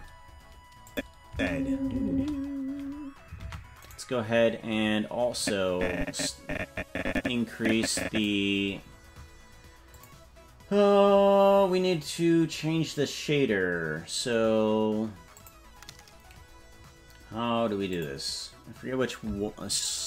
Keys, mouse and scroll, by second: 0.8 click, 1.2 space, 2.1 space, 3.4 ctrl+Tab, 3.8 right click, 5.3-8.2 drag, 9.9 click, 15.5 click, 17.9 click.